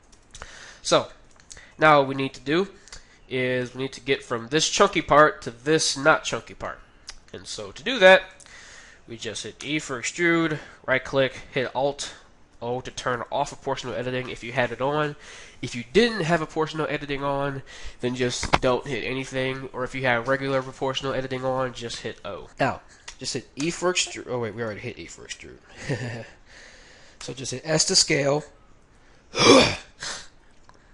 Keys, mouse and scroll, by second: 0.1 Tab, 6.7-10.3 middle drag, 9.6 e, 12.6 alt+o, 22.5-23.9 middle drag, 23.5 e, 25.3 ctrl+z, 27.2 s, 30.2 KP_1.